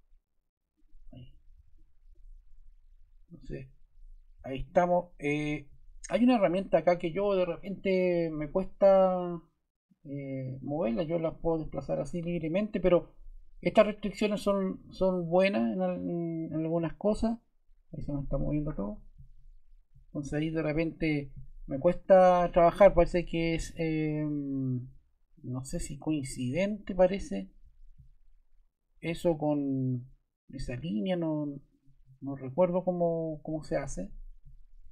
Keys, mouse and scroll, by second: 19.1 super+z, 20.3 super+z, 21.0 click.